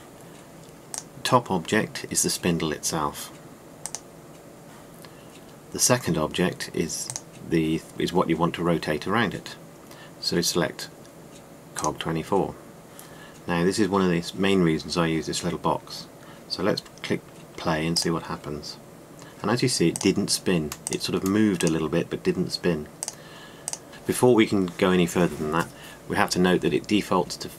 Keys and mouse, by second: 0.7-5.8 drag, 18.8 click, 20.6-21.1 middle drag, 21.6-22.5 drag, 23.9 r.